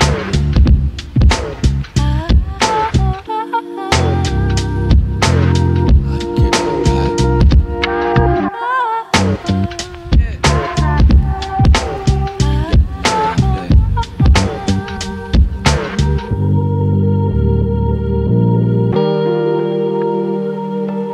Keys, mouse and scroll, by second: 2.9 right click, 6.3 click, 6.7 right click, 8.0-8.3 scroll up 1, 8.7 click, 11.7 scroll down 1, 12.1 right click, 13.4-14.5 typing, 16.7 shift+click, 17.5 right click.